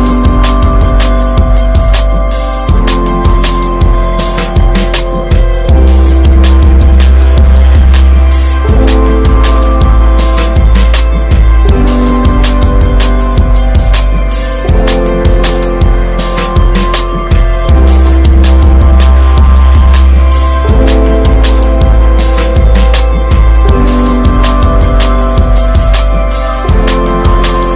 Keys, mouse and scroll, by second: 1.4 click, 2.3 click, 3.1 click, 4.1 click, 4.5 click, 6.2 click, 7.2 click, 7.7 click, 8.2 click, 8.5 click, 9.0 click, 11.1 click, 12.2 ctrl+z, 12.5 Tab, 12.6 click, 13.0 alt+z, 13.1 scroll down 1, 13.3 middle click, 13.7 Tab, 13.9 Tab, 14.2 click, 14.3-14.9 right drag, 14.9 Tab, 15.8 ctrl+h, 17.1 alt+h, 17.7 Tab, 17.8 click, 17.9-18.6 scroll down 1, 18.6 middle click, 18.8 click, 18.9-19.5 right drag, 19.5-20.1 middle drag, 20.1 click, 20.3 Tab, 20.7-22.0 middle drag, 22.0 ctrl+r, 24.5 middle click, 25.0 Tab, 25.3 Tab, 25.6 3, 25.9 middle click, 26.2 click, 26.4 shift+click.